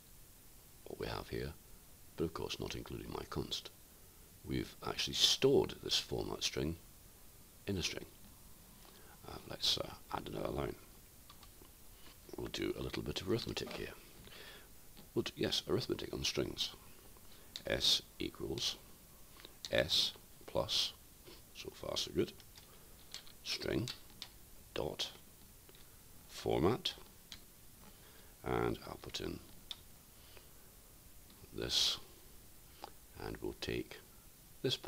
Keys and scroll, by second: 17.2-18.0 typing, 24.7 ., 26.2 typing.